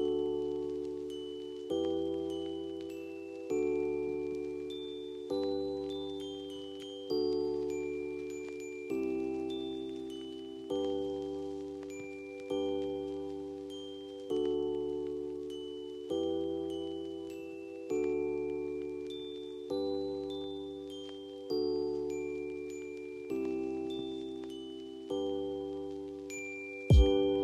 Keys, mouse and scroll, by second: 0.3 shift+click, 1.3 l, 2.3 click, 4.3 ctrl+u, 5.2 click, 6.6 F4, 7.3 F2, 7.6-10.9 drag, 10.9 F3, 11.7 click, 16.1 F2, 16.8 click, 17.6 space, 18.3 click, 19.1 ctrl+r, 20.0 click, 20.5 ctrl+r, 21.7 F3, 23.5-25.5 drag, 25.5 l, 27.2-27.4 drag.